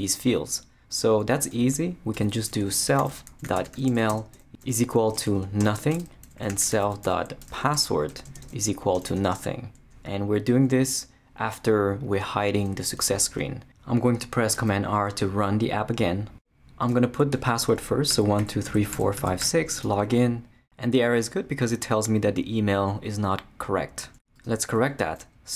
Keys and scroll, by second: 2.1 Return, 2.4-9.0 typing, 5.9 shift+Return, 14.5 super+r, 17.9-19.9 typing.